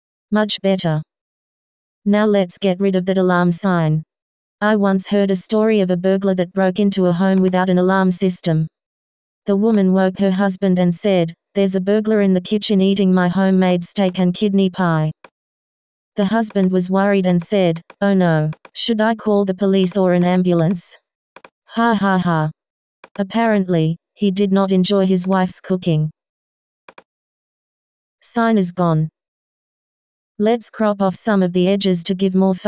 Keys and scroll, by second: 3.7 s, 24.2 super+z.